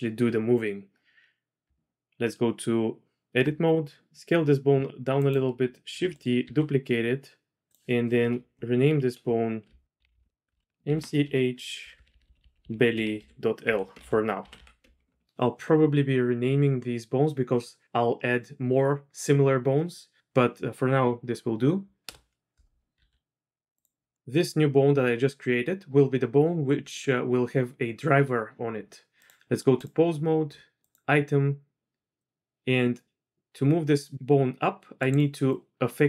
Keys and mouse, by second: 1.6 Tab, 4.1 s, 5.9 shift+d, 6.4 s, 8.2 F2, 10.0 BackSpace, 10.2 BackSpace, 11.9 Right, 12.0 Right, 12.4 Right, 14.5 BackSpace, 22.9 s, 29.2-29.9 drag, 30.9 click, 32.2-35.2 drag, 35.5-36.0 drag.